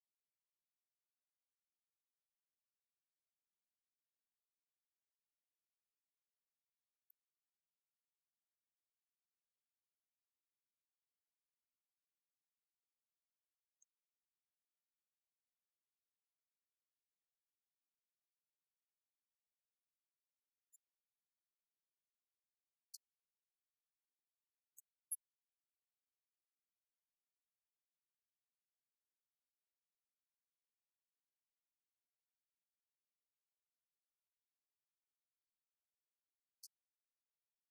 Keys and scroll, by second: 12.3 ctrl+Down, 24.4 ctrl+Up, 27.3 ctrl+Down.